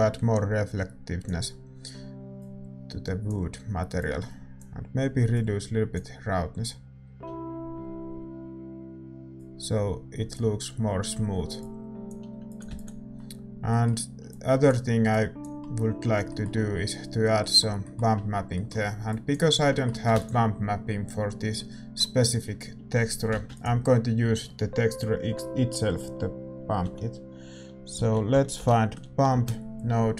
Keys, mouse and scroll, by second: 6.0-30.1 drag, 12.7 ctrl+s.